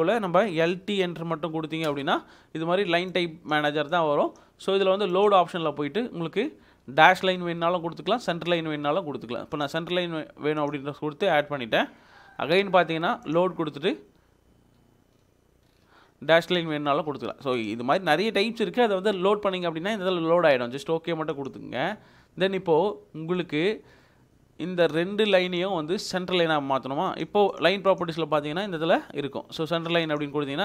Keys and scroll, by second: 0.1 Escape, 1.1-1.9 typing, 30.5 Escape.